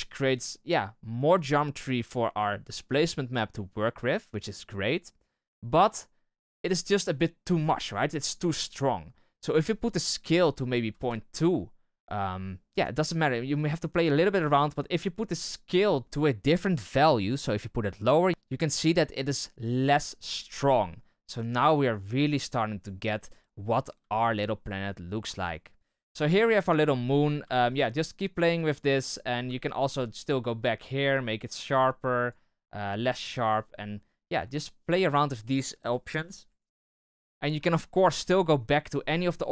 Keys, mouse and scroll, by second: 6.5-10.9 right drag, 10.9-12.4 drag, 12.9-15.8 shift+drag, 16.8-18.3 shift+drag, 24.4-26.4 scroll up 1, 26.4-27.8 right drag, 27.8-29.5 shift+drag, 29.5-31.0 shift+middle drag, 31.0-35.9 drag.